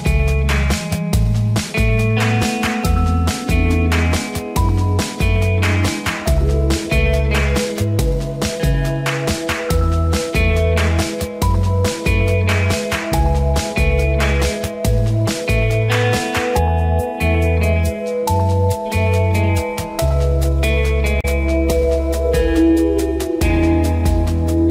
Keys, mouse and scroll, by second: 1.3 ctrl+a, 3.7 click, 9.0 ctrl+d, 9.4 click, 17.7 click, 18.0 f, 20.9 ctrl+=.